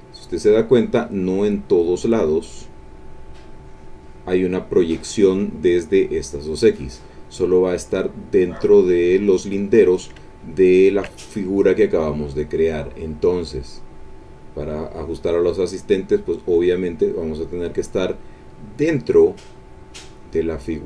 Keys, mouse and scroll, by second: 10.3 ctrl+middle click, 11.3 ctrl+middle click, 13.7-17.7 drag, 19.5 click, 20.3-20.8 drag.